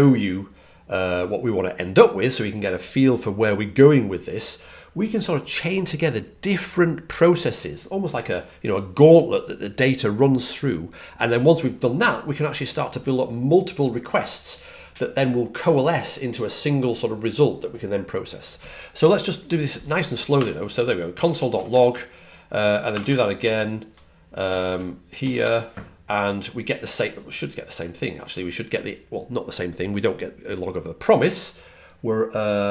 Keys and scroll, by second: 21.3-24.3 typing.